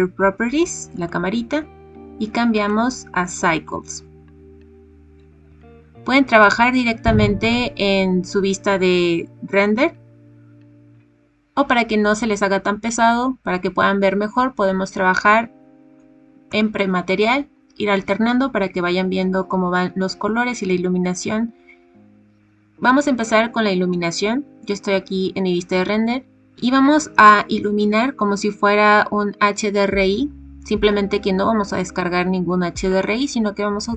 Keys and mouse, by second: 1.0-3.7 drag, 7.9 click, 16.7 click.